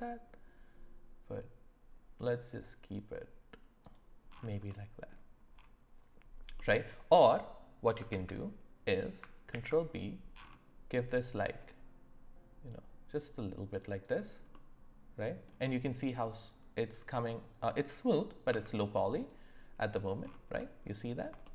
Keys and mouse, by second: 4.7 middle click, 6.6 middle click, 8.1 ctrl+z, 14.5 middle click, 18.5 Tab, 20.6-21.2 middle drag, 21.4-21.5 shift+middle drag.